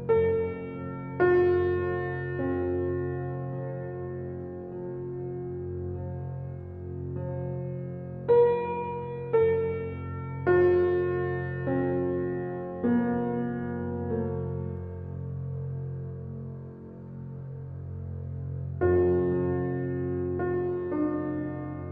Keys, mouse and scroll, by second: 2.5-4.5 drag, 6.0-8.3 drag, 8.8-10.1 drag, 10.1 ctrl+alt+scroll down 1, 13.7 ctrl+alt+scroll, 13.8 ctrl+alt+scroll up 1, 15.2 space, 15.3 click, 15.8 space, 16.3 alt+right click, 17.3-21.9 alt+drag.